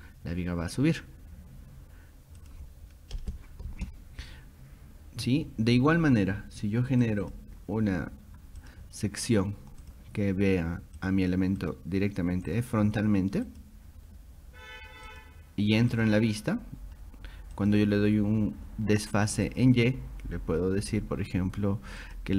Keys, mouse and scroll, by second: 2.4 click, 6.4-7.0 scroll down 2, 7.0 click, 7.2 click, 8.6 click, 9.8 click, 11.0 click, 11.6 click, 12.5 click, 13.5 click, 15.1 click, 15.7 click, 15.9 click, 17.0 scroll up 2, 17.6 click, 18.1 scroll up 2, 19.5 click, 22.0 click.